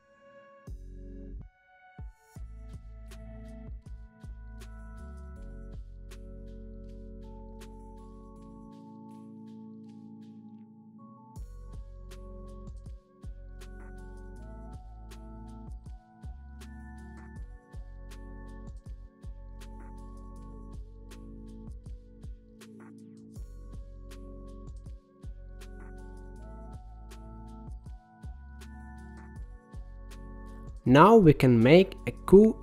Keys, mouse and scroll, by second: 2.7 click, 4.2 scroll down 1, 4.4-6.0 middle drag, 6.0 g, 7.4 click, 8.0 click, 8.4 g, 9.7 click, 9.9 g, 12.0 shift+a, 16.2-17.3 drag, 17.3-18.4 scroll up 6, 18.4 middle click, 18.8 shift+a, 22.1-23.7 drag, 24.2-25.3 drag, 25.4-28.6 middle drag, 28.7 click, 32.1-32.6 middle drag.